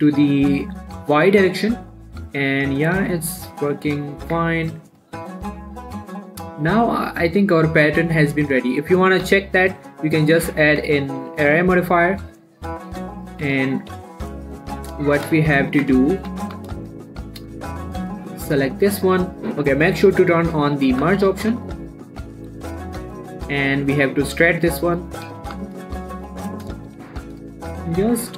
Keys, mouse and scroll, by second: 4.4 click, 4.7 Tab, 4.8-5.3 scroll down 1, 5.3 click, 5.6 middle click, 5.8 scroll up 1, 6.0-7.6 middle drag, 8.3 scroll up 1, 8.5 click, 8.5 click, 8.7 scroll down 1, 8.9 middle click, 9.5 ctrl+a, 10.0 click, 11.0 a, 11.6 click, 12.1 middle click, 12.3 scroll up 1, 13.2 click, 13.5 Tab, 15.0 7, 15.7 shift+middle click, 15.9 shift+scroll up 2, 16.1 Tab, 16.6 a, 16.8 z, 17.1 shift+middle click, 17.4 scroll up 1, 18.0-20.7 drag, 21.3 z, 21.8 z, 22.5 click, 23.1 g, 23.4 y, 24.9 click, 25.5 scroll up 1, 25.9 ctrl+z, 27.5 ctrl+z, 28.2 g.